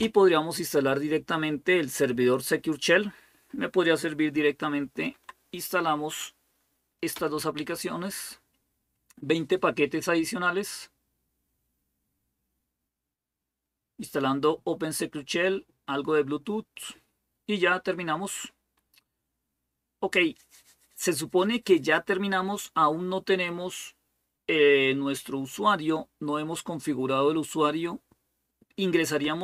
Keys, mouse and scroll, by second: 4.9 Tab, 6.9 Return.